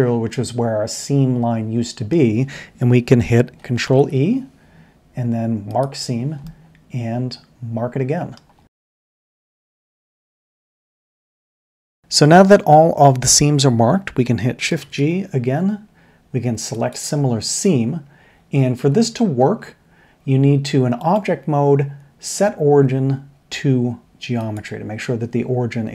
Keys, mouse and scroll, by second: 3.8 ctrl+e, 6.8-8.2 middle drag, 8.6 ctrl+e, 9.2-9.6 middle drag, 14.7 shift+g, 19.4 Tab.